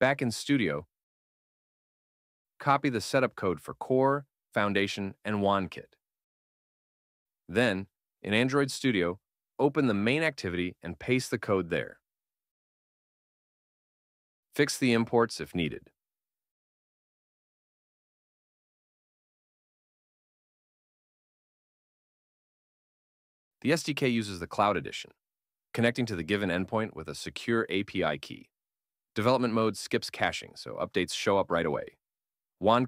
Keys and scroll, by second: 6.5 super+c, 10.9 super+v, 13.7 BackSpace, 15.6 alt+Return, 17.5 Up, 18.0 alt+Return, 22.1 alt+Return.